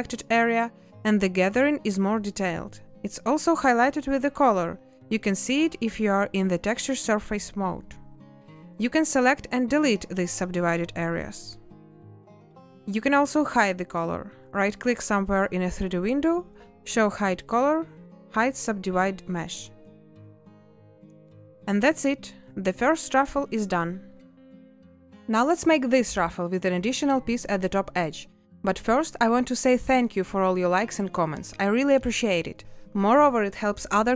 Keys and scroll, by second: 0.3 a, 7.8 a, 9.3 space, 11.1 Delete.